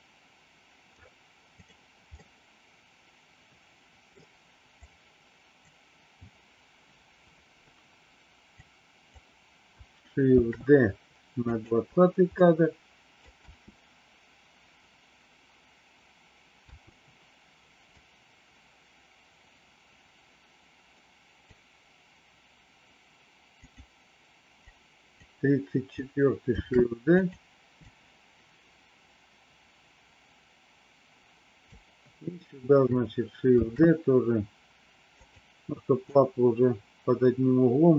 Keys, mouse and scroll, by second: 1.5 click, 2.1-4.1 middle drag, 4.7 click, 8.5 click, 10.4 shift+d, 12.3 middle click, 13.3 space, 16.6 space, 17.9-21.4 drag, 23.5 click, 24.6 click, 26.5 shift+d, 27.8-31.6 drag, 33.5 shift+d, 36.0-37.9 drag.